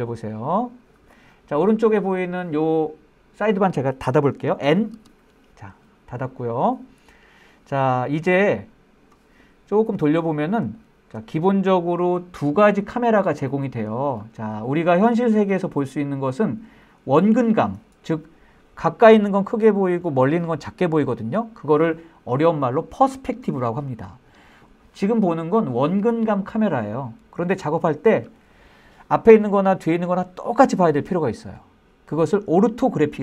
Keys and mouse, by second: 0.2-0.6 shift+middle drag, 0.8 shift+middle drag, 1.2-1.8 shift+middle drag, 2.0-2.5 middle drag, 5.1 n, 9.5-10.6 middle drag, 10.9-11.2 shift+middle drag, 11.4 middle click, 13.6-14.3 middle drag, 14.8-16.8 shift+middle drag, 25.4-33.2 middle drag.